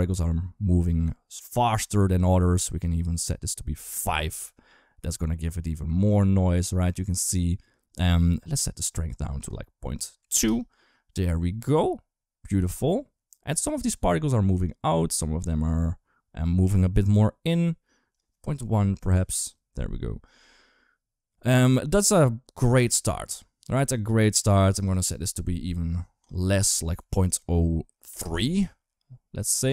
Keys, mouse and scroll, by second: 2.5-3.7 drag, 8.2 click, 9.3 click, 17.9-19.1 drag, 24.6 click, 26.0-28.0 drag.